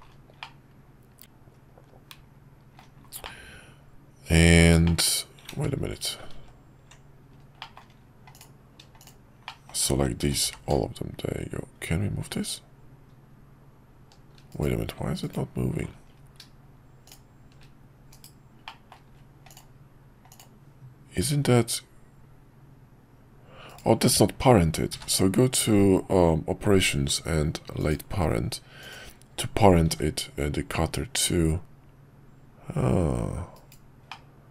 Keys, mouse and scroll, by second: 0.4-2.7 middle drag, 3.2-4.4 middle drag, 4.8-5.1 shift+middle drag, 5.7 ctrl+z, 7.6 middle click, 9.4 shift+middle click, 18.6 middle drag, 21.2 g, 24.9 q, 34.1-34.5 middle drag.